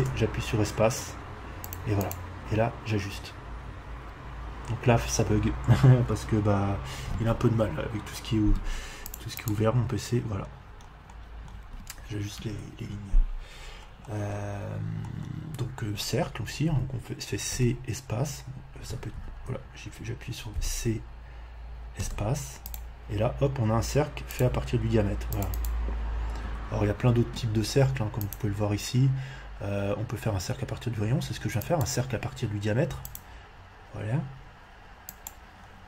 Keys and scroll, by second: 12.3 Escape, 16.6 c, 17.5 v, 17.5 space, 19.2 Escape, 20.5 c, 22.0 space, 26.4 Escape.